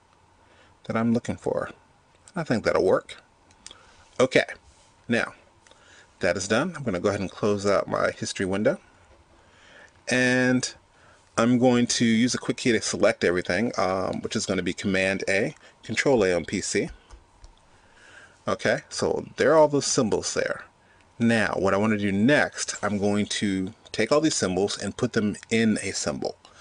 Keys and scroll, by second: 16.6 super+a.